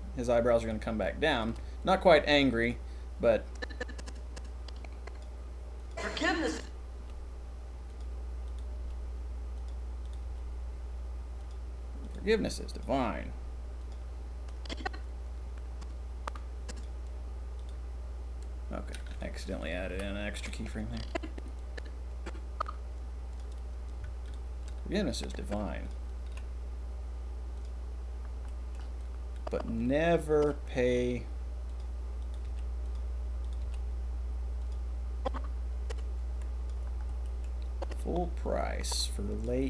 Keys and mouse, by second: 1.3 shift+click, 1.9 g, 3.5 click, 5.2-5.7 middle drag, 5.9 middle click, 6.4 click, 6.9 g, 8.4 click, 8.7 g, 10.2 g, 12.0 click, 12.2 g, 13.3 g, 14.4-15.2 drag, 19.4 click, 19.9 Delete, 20.4-21.8 drag, 23.3 middle click, 24.2 shift+click, 25.2-25.9 drag, 26.2 g, 28.5 click, 28.9-30.4 drag, 30.8 g, 32.5 g, 33.4 click, 33.5 g, 35.2-35.9 drag, 37.4-37.7 middle drag, 38.9-39.4 drag.